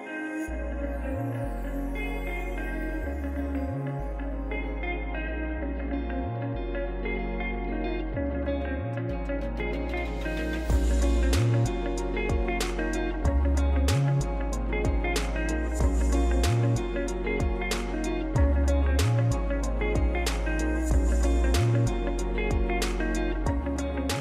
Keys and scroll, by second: 4.8-5.5 typing.